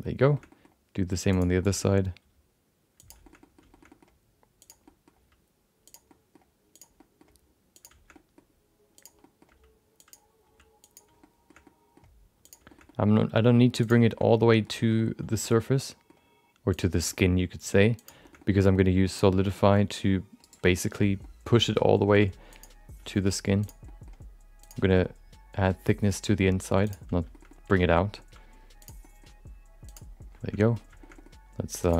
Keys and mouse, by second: 0.1 middle click, 0.5 middle click, 1.3 click, 1.6 shift+middle click, 1.7 middle click, 2.2 g, 3.4 middle click, 3.9 middle click, 4.6 click, 4.8 middle click, 5.1 g, 6.1 middle click, 6.7 click, 6.9 middle click, 7.3 g, 8.1 middle click, 8.9 click, 9.3 middle click, 9.5 g, 10.4 g, 11.2 shift+middle click, 11.7 middle click, 12.4 click, 12.6 middle click, 12.8 middle click, 13.4 g, 14.1 middle click, 14.4 middle click, 15.0 middle click, 15.6 middle click, 16.7 click, 16.9 middle click, 17.1 middle click, 17.5 g, 18.4 middle click, 19.1 click, 19.3 middle click, 19.6 g, 20.7 middle click, 21.2 middle click, 21.6 middle click, 21.8 middle click, 22.5 click, 23.6 click, 23.9 middle click, 24.6 click, 24.9 middle click, 25.1 g, 27.5 middle click, 27.9 middle click, 28.8 click, 29.0 middle click, 29.3 g, 30.6 middle click, 31.0 middle click, 31.8 click.